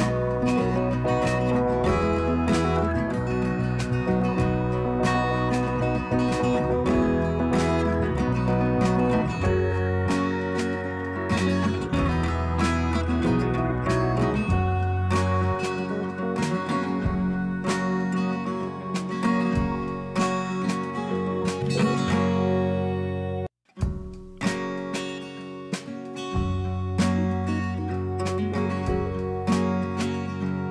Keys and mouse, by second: 4.2 click, 4.3 click, 7.9-9.9 drag, 10.1 click, 11.2-14.7 drag, 16.8 click, 16.8 click, 18.0 click, 18.9 click, 20.6 right click, 22.8 click, 23.0 click, 23.9 right click, 26.1 click, 28.7 click, 30.3 right click.